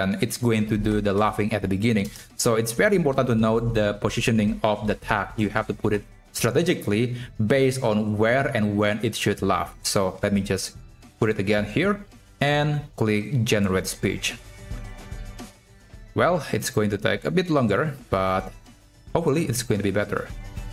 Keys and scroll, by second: 1.0 BackSpace, 2.1 shift+Left, 4.6 ctrl+x, 9.9 ctrl+v.